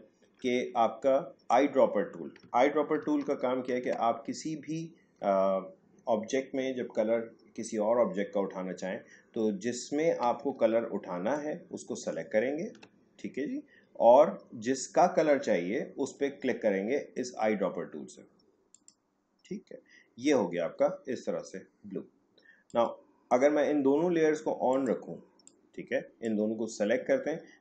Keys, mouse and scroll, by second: 3.0 ctrl+shift+z, 10.4 ctrl+shift+z, 11.3-15.0 ctrl+drag, 18.7 click, 22.7-27.6 drag.